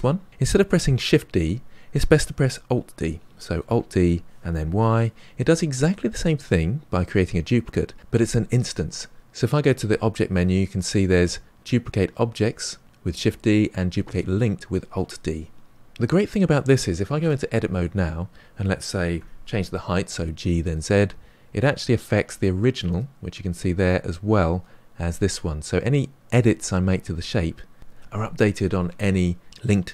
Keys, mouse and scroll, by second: 3.7 alt+d, 7.6-8.5 middle drag, 9.2 click, 15.8 Tab, 17.1 Tab, 19.1 g, 28.9 scroll down 1, 29.1-29.9 middle drag.